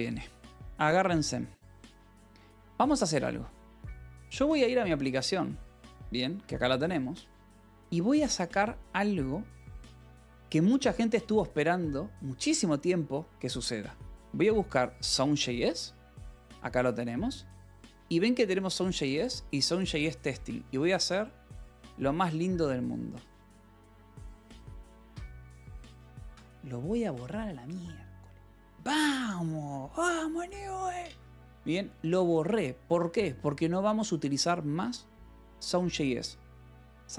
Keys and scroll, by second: 0.7-2.1 typing, 3.1 j, 4.8 j, 6.1 alt+Tab, 6.8 j, 7.4 k, 7.7 j, 9.6 j, 10.9-17.2 typing, 14.9 Return, 17.2 Escape, 18.4 v, 19.1 e, 20.2 Escape, 21.6 h, 23.7-25.0 typing, 25.6 Escape, 26.9 ctrl+s, 32.0 Escape, 32.8 j, 33.3 k, 36.6 u.